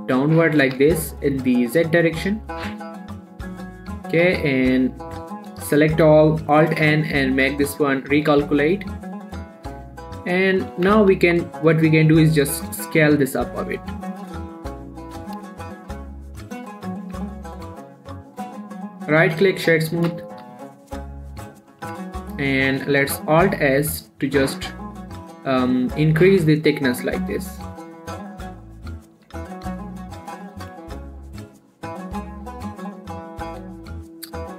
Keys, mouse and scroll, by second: 1.0 z, 3.2 click, 3.3 Tab, 3.6 middle click, 4.5 ctrl+a, 4.9 click, 5.4 Tab, 6.7 alt+a, 7.1 alt+n, 8.1 click, 8.7 Tab, 8.9 scroll down 1, 9.0-10.8 middle drag, 11.0 scroll up 1, 11.1 Tab, 11.4 a, 11.7 scroll up 1, 12.1 s, 14.4 click, 14.7 scroll down 1, 14.8 middle click, 15.4 s, 15.7 x, 16.9 right click, 17.2 scroll down 1, 17.2 middle click, 17.4 Tab, 17.6 middle click, 17.9 scroll up 1, 18.1 click, 18.5 scroll down 1, 19.0 click, 19.4 right click, 19.7 click, 20.4 g, 20.7 z, 21.6 click, 21.9 scroll down 1, 21.9 middle click, 22.2 Tab, 22.6-23.1 scroll up 1, 23.3 alt+s, 24.3 right click, 24.6 alt+s, 29.0 click, 29.4 scroll down 1, 29.6 Tab, 29.8 middle click, 31.0 scroll up 1, 31.6 alt+s, 32.3 click, 32.6 scroll down 1, 32.7 middle click, 33.8 scroll up 1, 34.0 shift+middle click.